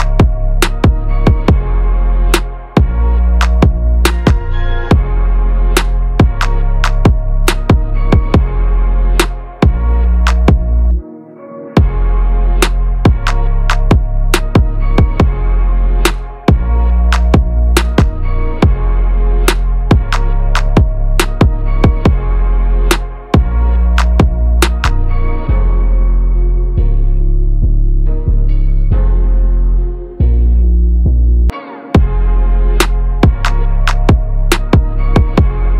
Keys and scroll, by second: 0.3 ctrl+a, 1.2 ctrl+v, 9.6 ctrl+-.